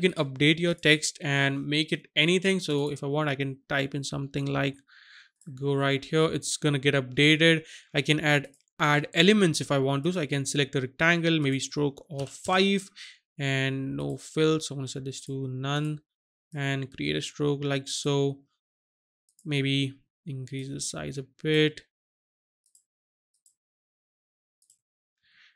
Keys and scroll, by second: 12.2 KP_5, 12.4 Return.